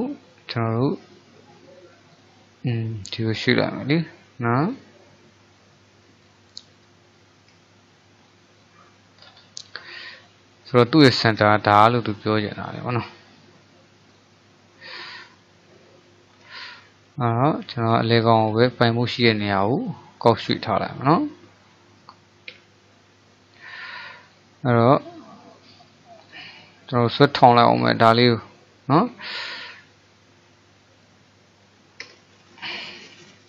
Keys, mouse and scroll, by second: 3.5-4.7 middle drag, 4.7 drag, 6.3 click, 7.1-8.6 shift+middle drag, 8.6 drag, 9.3-10.0 scroll down 4, 10.0-11.1 middle drag, 11.1-11.7 scroll up 3, 11.7-14.2 shift+middle drag, 14.2 click, 16.4 shift+s, 18.7-19.5 shift+middle drag, 19.5 click, 20.4-22.6 middle drag, 22.6 KP_1, 24.3 click, 26.2-27.8 drag, 27.8 r.